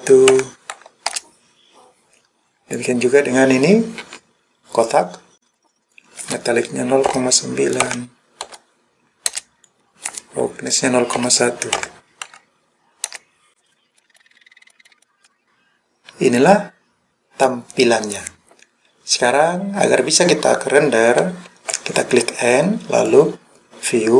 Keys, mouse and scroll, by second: 2.8 click, 5.7 scroll down 1, 5.9-9.4 drag, 5.9-6.8 scroll down 1, 9.6-13.2 drag, 9.6-11.2 scroll up 5, 14.0 middle click, 14.8 middle click, 15.0-15.4 scroll up 1, 15.4-17.5 middle drag, 21.8 n, 23.0 click.